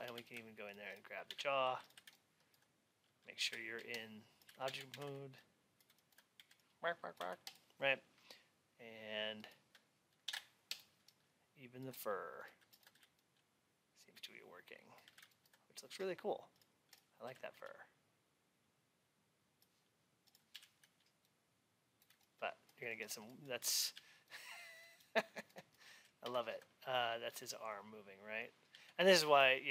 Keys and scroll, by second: 0.0 alt+x, 23.9 alt+w, 26.2 alt+x.